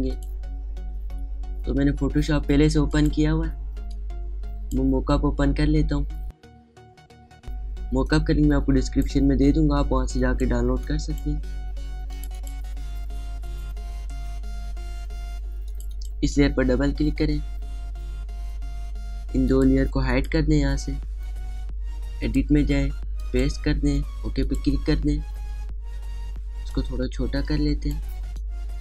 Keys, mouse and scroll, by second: 0.9 click, 3.7-12.9 drag, 16.5 click, 23.1 click, 27.5-28.8 drag, 28.3 click.